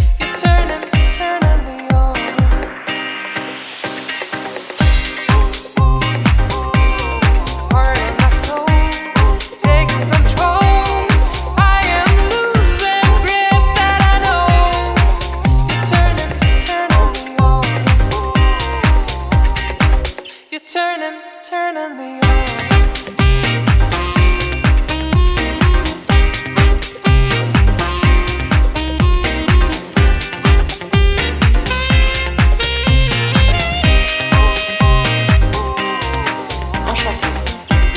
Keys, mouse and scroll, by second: 0.3 scroll down 3, 0.6 middle click, 1.5 scroll down 2, 1.7 middle click, 2.1 click, 2.5-2.8 scroll down 2, 3.6 scroll down 2, 4.7 click, 9.5 scroll down 2, 9.6 scroll up 1, 10.0 click, 10.8 scroll up 1, 11.1-12.0 scroll down 2, 12.2 scroll up 1, 12.9-13.3 scroll up 1, 13.3 click, 14.7-15.1 scroll down 1, 15.7 shift+click, 15.9 shift+click, 17.3 ctrl+l, 18.7 click, 19.1-19.8 scroll up 3, 20.3 click, 21.2 scroll down 3, 21.4 middle click, 21.9 scroll up 5, 22.8 middle click, 23.9 click, 23.9 scroll down 1, 24.4-25.1 scroll down 6, 25.1 middle click, 25.7 scroll up 3, 27.0 shift+click, 27.8 click, 29.1 middle click, 29.9 click, 30.5 scroll up 3, 31.1 shift+click, 31.5 scroll down 4, 32.3 click, 32.9-33.7 scroll up 6, 34.1 shift+click, 34.5 scroll down 6, 35.2 scroll down 6, 35.5 KP_1.